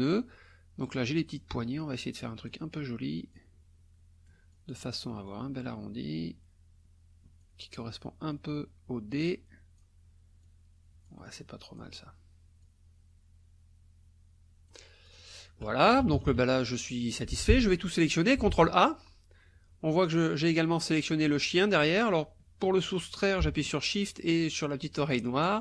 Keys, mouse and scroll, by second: 1.2-2.7 drag, 3.3-4.9 drag, 5.3-7.6 drag, 8.3-10.0 drag, 10.4-12.0 drag, 12.6-14.9 drag, 15.0 click, 15.9 KP_Subtract, 17.1 click, 17.3 F1, 17.4 click, 18.5 ctrl+a.